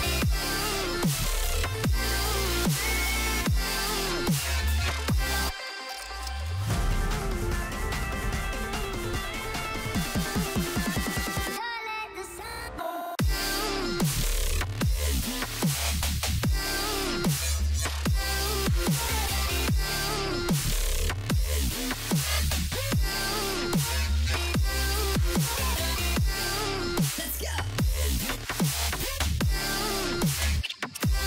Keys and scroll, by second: 3.4-4.7 typing, 6.8 ctrl+l, 27.3 ctrl+v, 28.0 Return.